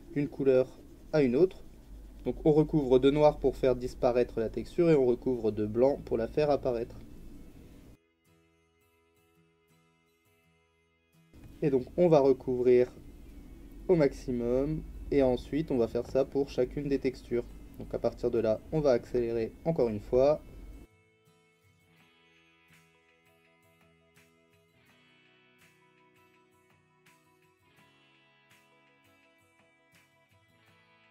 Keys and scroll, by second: 3.1 x, 23.3 ctrl+z, 23.4 x, 29.8 x, 30.2 Delete.